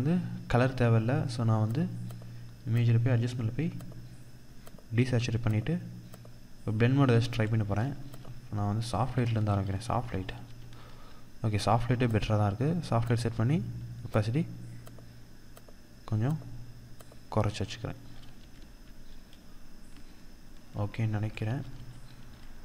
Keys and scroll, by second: 9.5 ctrl+=, 17.8 ctrl+0, 20.8 ctrl+=.